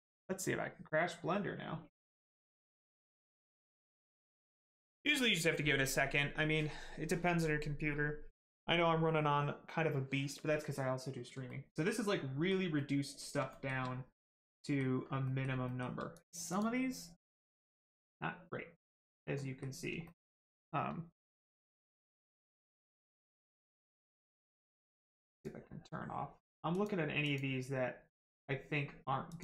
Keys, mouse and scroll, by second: 11.5 middle click, 13.5 shift+middle click, 13.8 middle click, 14.5 middle click, 14.9 scroll up 1, 15.2 middle click, 15.7 shift+middle click, 16.1 click, 16.5 click, 19.3 middle click, 20.0 shift+middle click, 25.3 click, 29.3 click.